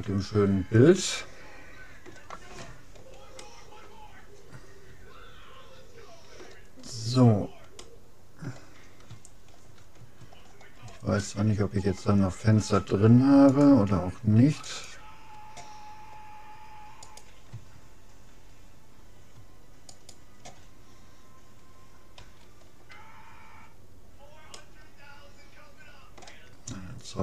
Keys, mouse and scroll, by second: 2.4 middle click, 3.5-5.1 middle drag, 7.3-10.4 middle drag, 10.4 scroll up 1, 10.5-12.9 middle drag, 13.5-15.3 drag, 14.7-16.3 right drag, 17.1-18.9 right drag, 19.9-21.7 right drag, 22.2 f, 23.5-26.3 middle drag, 26.7-27.2 scroll down 1.